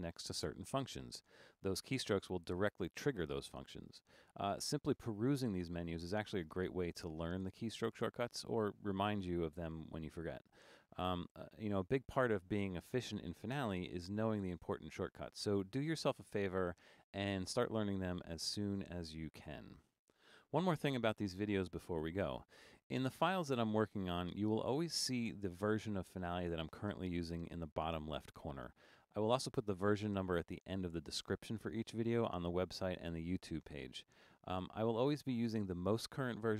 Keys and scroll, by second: 17.9 super+=, 20.1 super+=.